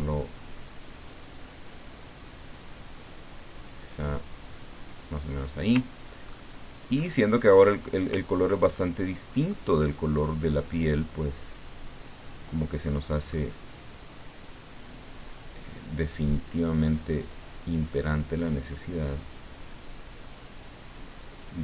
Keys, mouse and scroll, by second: 1.1-5.1 drag, 6.2-6.7 ctrl+scroll up 2, 8.8 ctrl+middle click, 10.5-12.7 drag, 12.9 middle click, 16.2-17.5 drag, 18.6-21.5 drag.